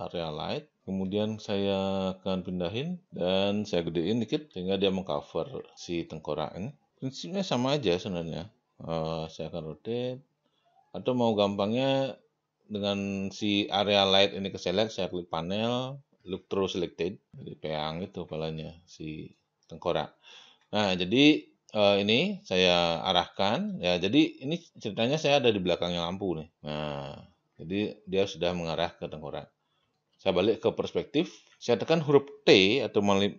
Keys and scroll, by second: 9.1 e, 29.8 space.